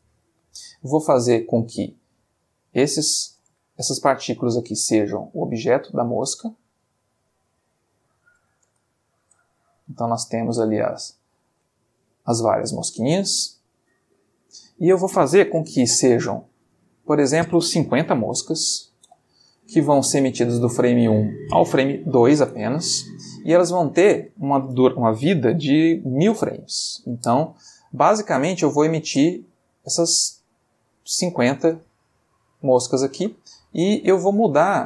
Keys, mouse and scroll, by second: 1.9 click, 3.0 click, 3.5 Escape, 4.0 click, 5.0 click, 6.8 click, 7.8 click, 8.6 space, 9.5-10.9 ctrl+middle drag, 11.1-11.8 ctrl+shift+middle drag, 12.6 Escape, 15.6-16.4 shift+middle drag, 17.0 click, 18.2 5, 18.4 0, 21.0 click, 22.1 2, 24.0 click, 25.8 1, 26.0 0, 26.9 Return, 28.1-29.1 ctrl+middle drag, 29.2 ctrl+space, 31.0 Escape, 31.6 space, 32.8 space, 34.1-34.8 middle drag.